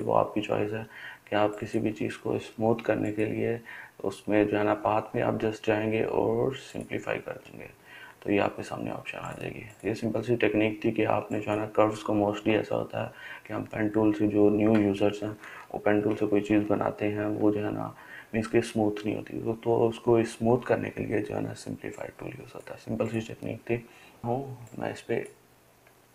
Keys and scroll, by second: 24.2 ctrl+z.